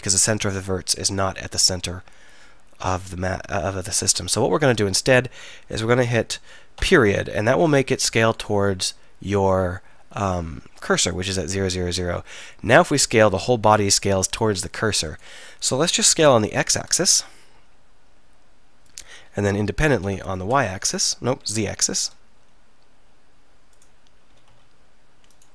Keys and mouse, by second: 0.6-6.8 middle drag, 6.8 ., 12.0 s, 16.3 s, 20.0 s, 23.9 click, 24.4 s.